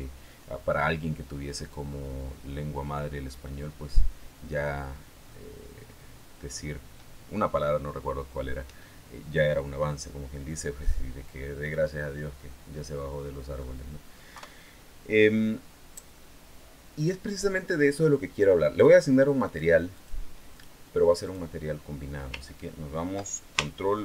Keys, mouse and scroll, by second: 11.5-13.5 middle drag, 14.1 KP_3, 15.0-15.4 scroll up 2, 15.8-19.2 scroll down 2, 19.2 click, 19.7 click, 21.0 click.